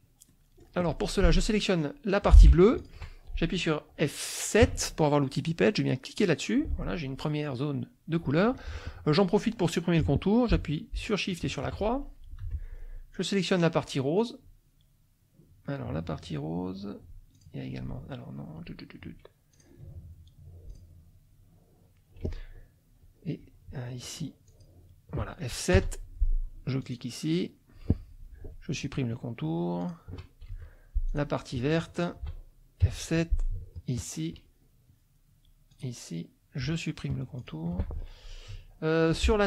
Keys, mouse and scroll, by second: 0.3 click, 1.2 F2, 1.3 click, 2.7 shift+click, 3.5 click, 4.6 F7, 6.2 click, 11.3 shift+click, 12.4 F2, 13.1 click, 17.3 shift+click, 19.5 click, 20.7 click, 24.5 shift+click, 25.7 F7, 26.8 click, 29.8 shift+click, 30.5 shift+F2, 31.1 shift+click, 31.9 shift+click, 32.8 F7, 33.9 shift+click, 35.7 click, 37.4 shift+click, 38.5 F2.